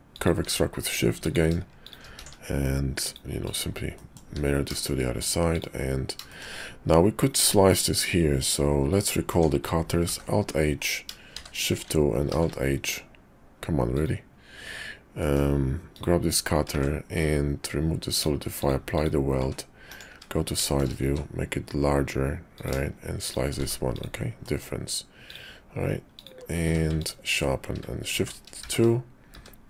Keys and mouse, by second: 1.8 shift+click, 2.2 alt+x, 3.0 click, 3.4 click, 4.0 click, 4.2 `, 4.7 shift+click, 5.5 click, 6.3 shift+click, 8.4 click, 11.3 shift+2, 12.3 alt+h, 13.9 click, 15.2 click, 15.9 click, 16.7 ctrl+`, 20.1 `, 20.6 shift+click, 21.0 s, 23.2 shift+click, 23.6 q, 24.4 click, 25.3 click, 26.1 click, 26.9 ctrl+q, 28.1 shift+3, 28.6 shift+2, 29.3 `.